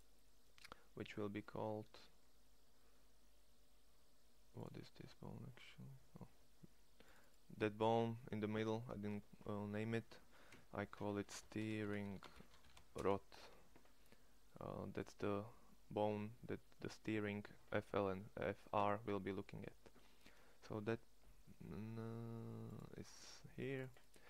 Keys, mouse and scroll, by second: 1.2 click, 5.0 middle click, 11.3 e, 14.5 click, 18.7 middle click.